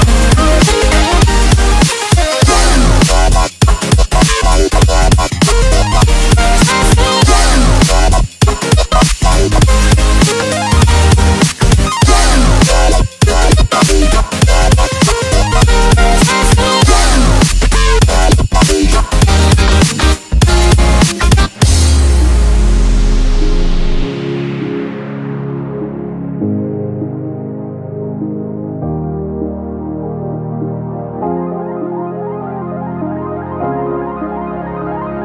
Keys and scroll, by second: 0.1 ctrl+space, 6.2 6, 6.5 Return, 7.2 F5, 10.2 F7, 10.6 space, 12.3-14.0 typing, 16.5 4, 18.1 x, 29.0 space, 29.2 z, 30.2 ctrl+z, 30.4 ctrl+space, 31.6 ctrl+space, 32.3 ctrl+space, 32.4 z, 35.0 space.